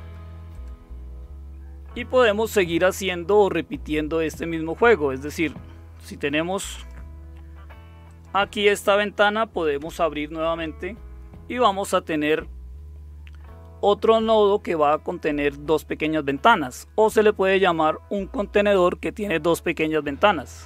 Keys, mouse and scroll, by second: 6.9 click, 8.0 click, 9.8 super+Return.